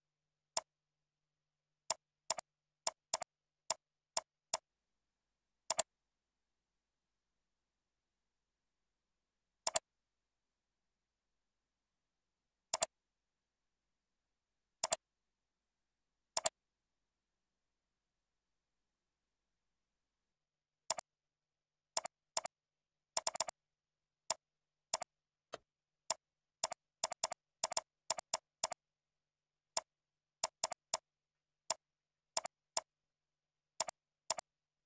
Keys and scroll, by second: 14.2 ctrl+c, 15.4 ctrl+v, 22.9 ctrl+c, 23.8 ctrl+v, 25.3 ctrl+a, 33.6 ctrl+z.